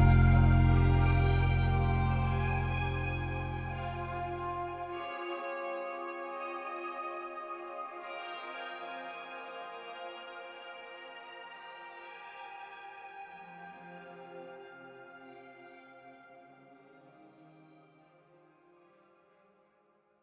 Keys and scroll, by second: 1.5 space, 2.7 space, 5.0 space, 7.6 Delete, 7.7 space, 8.5 space, 9.5 space, 12.1 n, 14.4 space, 15.4 space, 17.9 space, 18.8 2.